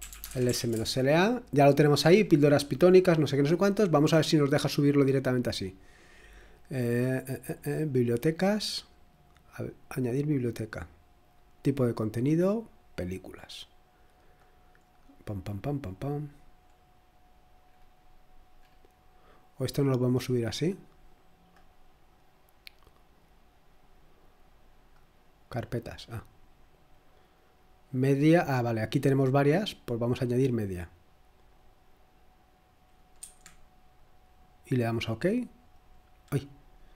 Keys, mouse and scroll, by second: 0.0-1.0 typing, 4.3 click, 7.9 click, 8.1 click, 10.0 click, 11.5 click, 12.9 click, 14.6-19.3 scroll down 5, 19.3-19.8 scroll down 1, 19.8-21.5 scroll up 2, 21.5-24.2 drag, 26.1 click, 28.3-29.4 scroll down 2, 29.4 scroll down 1, 29.5 click, 31.8 click, 33.2 Escape, 33.9-36.9 drag.